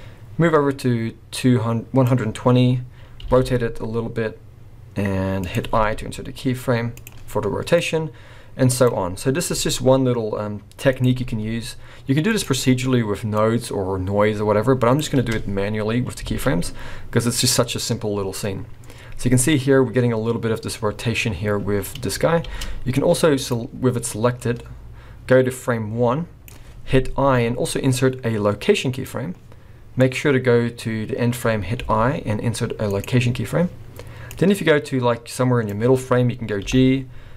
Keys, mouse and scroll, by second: 3.2 r, 5.8 i, 7.8 click, 9.5 r, 11.3 i, 13.4 click, 15.1 space, 16.3 alt+a, 22.5 space, 23.4 click, 24.5 click, 27.2 i, 30.0 click, 31.8 i, 34.3 click, 36.7 g.